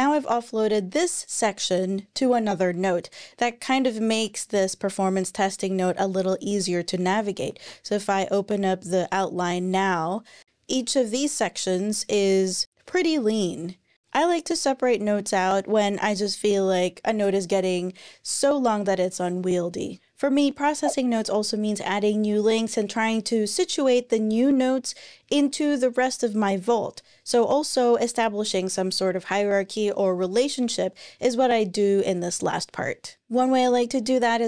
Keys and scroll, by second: 7.4 ctrl+super+r.